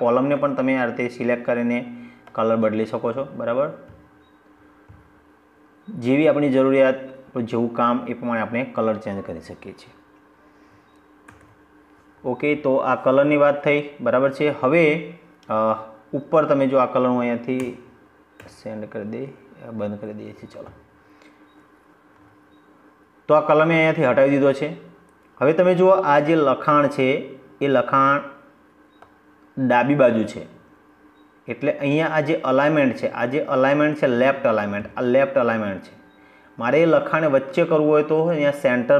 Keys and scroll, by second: 10.1 ctrl+z, 16.4 ctrl+z.